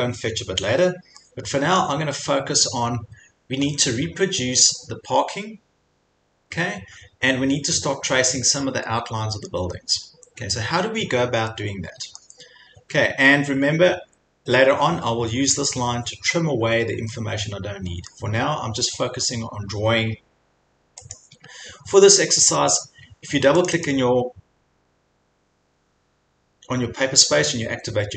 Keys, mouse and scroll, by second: 1.8 middle click, 2.5-2.9 scroll, 3.7-4.0 scroll, 9.5 scroll, 10.2 middle click, 10.3 middle click, 12.2 middle click, 15.8 scroll, 18.1-19.5 scroll, 21.1 click, 22.0-22.5 scroll, 23.1 scroll, 23.7 click, 23.9 click, 24.7 scroll.